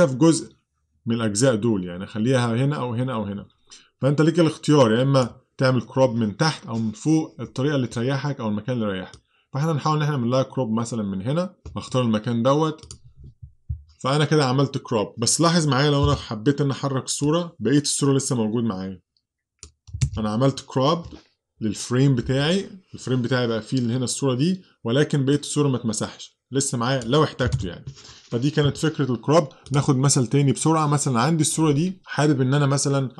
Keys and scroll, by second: 16.1 v, 20.1 super+z, 27.6 super+z.